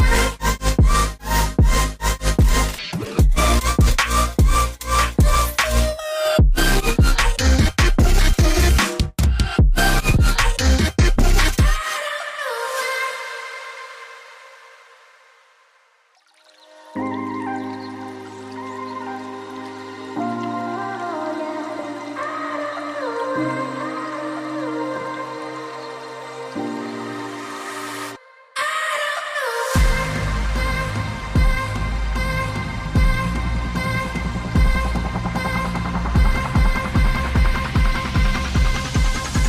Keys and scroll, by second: 5.8 v, 7.1 ctrl+alt+2, 7.7 a, 8.3 v, 8.6 ctrl+alt+3, 10.7 a, 11.0 g, 15.4 v, 23.2 ctrl+shift+], 24.4 ctrl+shift+], 26.3 ctrl+x, 26.4 ctrl+z, 26.5 ctrl+z, 27.3 ctrl+z, 27.7 ctrl+f, 29.4 Delete, 30.6 v, 31.3 g, 33.3 v, 35.2 a, 35.3 g, 37.4 v, 38.9 v.